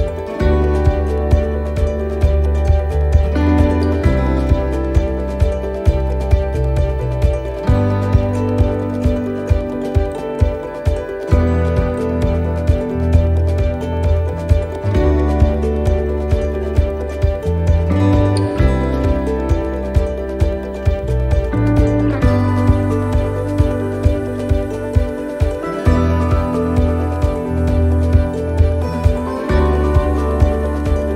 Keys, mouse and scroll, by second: 3.1 click, 3.1 s, 5.2 s, 8.2 click, 10.6 middle click, 12.9 click, 23.4 click, 25.7 s, 29.4 alt+s.